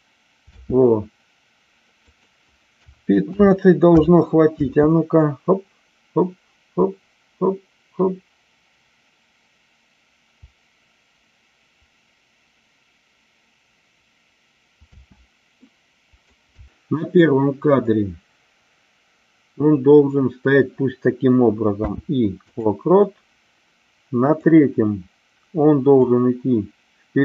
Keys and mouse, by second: 2.1-4.3 drag, 4.7 space, 14.8 space, 15.5-16.4 middle drag, 16.7 Delete, 24.3 click, 25.9-27.2 drag.